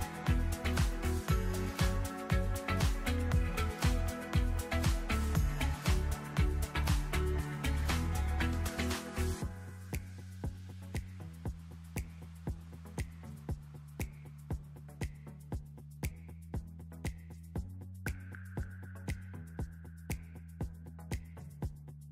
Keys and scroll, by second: 11.1 ctrl+z.